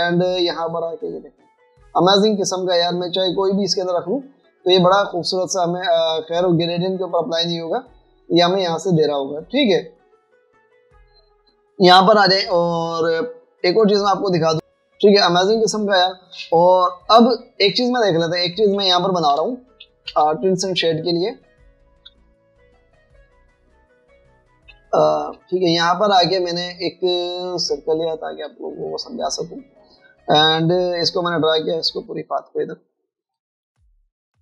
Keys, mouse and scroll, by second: 2.1 double click, 3.4 double click, 6.1 double click, 10.0 v, 18.9 alt+scroll down 1, 19.9 alt+scroll down 1, 24.4 super+-, 24.5 super+-, 25.8 space, 27.7 right click, 29.0 space.